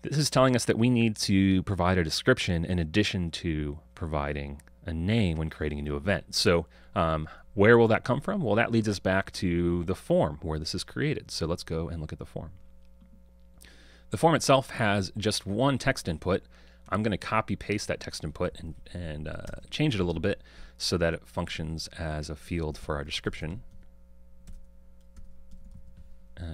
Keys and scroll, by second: 18.6 super+c, 20.0 super+v.